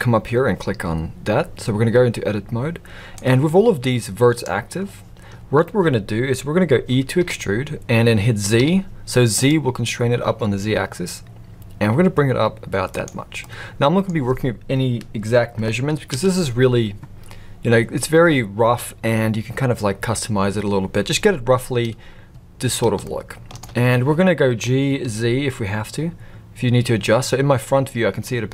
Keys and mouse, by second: 3.1-5.2 drag, 7.2 e, 13.4 middle click, 16.0 KP_1, 23.0-23.6 shift+middle drag, 24.5 g.